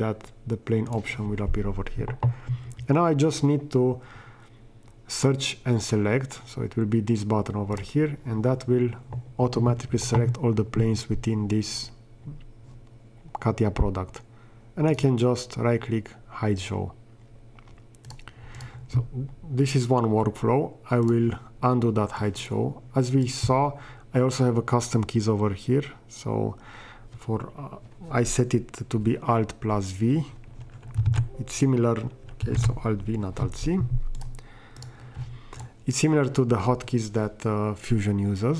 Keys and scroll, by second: 31.1 alt+c, 32.5 alt+v.